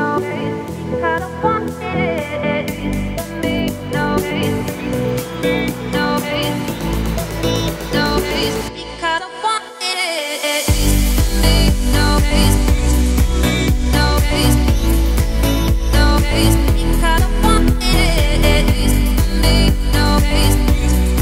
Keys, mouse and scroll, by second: 1.8 shift+right click, 2.4 shift+a, 9.4-11.1 drag, 11.1 Tab, 11.4 scroll down 3, 11.7 a, 11.8-12.3 scroll up 1, 12.3 scroll up 4, 12.6 s, 13.6-14.6 middle drag, 14.6 `, 15.0-15.3 scroll up 3, 15.3 shift+middle click, 15.9 r, 18.1 scroll down 3, 18.3 middle click, 18.8 `, 19.3 scroll down 5, 19.6 s, 20.2 s.